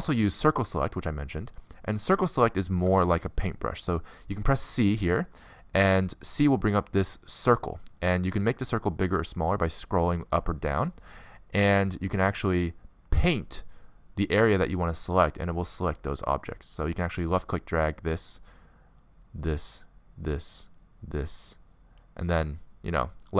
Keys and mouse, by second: 3.5 c.